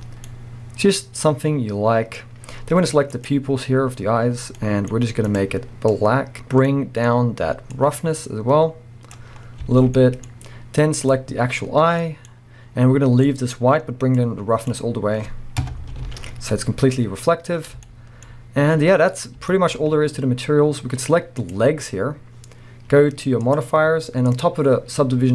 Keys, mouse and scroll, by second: 0.0-0.3 scroll down 1, 0.3-3.3 middle drag, 2.3-3.3 scroll up 1, 3.3 click, 7.8-10.0 drag, 9.4-9.7 scroll down 1, 9.7 alt+a, 10.0-11.2 middle drag, 10.3-11.2 scroll up 1, 11.2 click, 14.2-16.1 drag, 15.6 KP_0, 16.1 alt+a, 16.3 scroll up 1, 17.5 scroll down 1, 17.9 shift+middle click, 18.4-19.0 scroll down 1, 19.7 shift+middle click, 19.8-20.4 scroll up 1, 21.6 click.